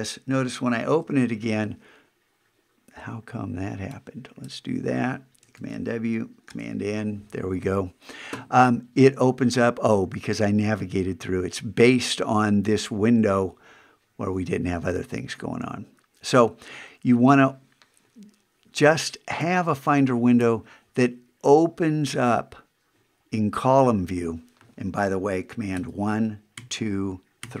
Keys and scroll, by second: 0.9 super+n, 5.6 super+w, 6.5 super+n, 25.7 super+1, 26.5 super+2, 27.4 super+3.